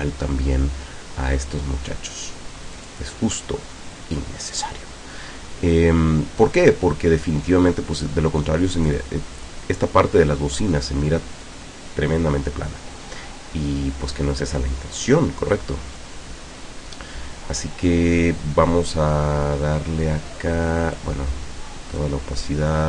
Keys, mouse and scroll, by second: 2.8 click, 8.7 click, 9.4 click, 21.0-22.2 drag.